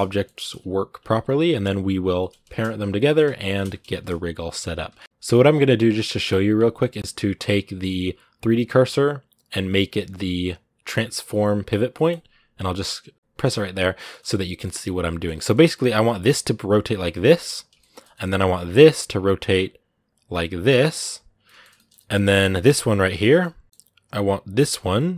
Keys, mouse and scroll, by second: 0.8 scroll up 2, 1.3 right click, 2.0-3.8 shift+middle drag, 3.8 scroll up 2, 5.0-6.7 scroll down 1, 13.1 click, 13.5 scroll down 1, 13.8-15.6 shift+middle drag, 15.6 r, 17.6-18.6 shift+middle drag, 18.6 click, 18.8 r, 19.9 right click, 20.1 r, 21.2 shift+middle click, 21.9 scroll up 2, 22.1 middle click, 22.8 right click, 23.0 shift+middle click, 23.8 right click, 24.7 middle click.